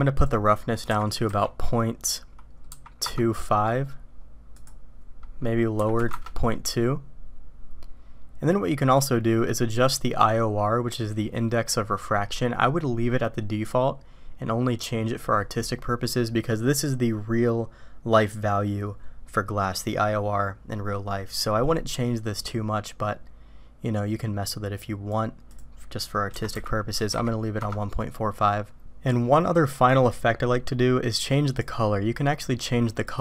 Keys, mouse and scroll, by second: 0.2-8.4 drag, 21.4-25.1 drag, 25.6-28.4 drag, 31.5 click.